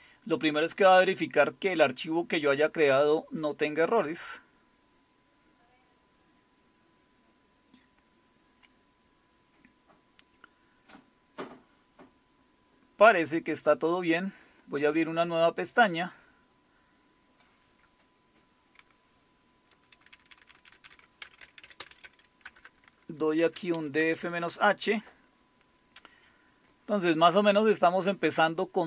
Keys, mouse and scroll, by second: 15.7 click, 19.7 ctrl++, 19.9 ctrl++, 20.1 ctrl++, 20.3 ctrl++, 20.5 ctrl++, 20.8 ctrl++, 21.2-24.7 typing, 27.5-28.8 drag.